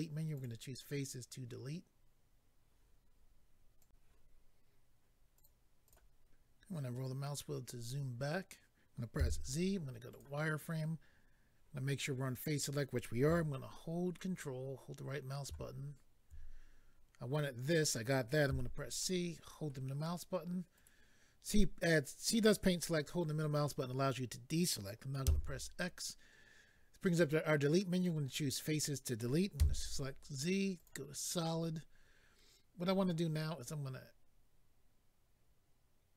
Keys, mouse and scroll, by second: 0.3 click, 0.4 click, 3.8 click, 3.9 click, 5.4 click, 5.9 double click, 6.4-7.1 scroll down 2, 10.1 click, 10.1 z, 10.2 click, 14.1 ctrl+right click, 18.9 c, 19.0 middle click, 20.8 right click, 28.0 click, 30.8 click, 30.8 z.